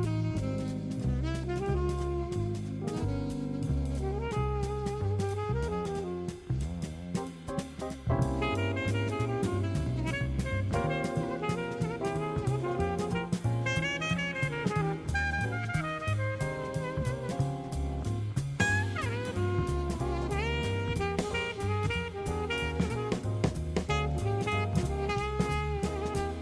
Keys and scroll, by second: 8.8 super+d, 10.1 super+d.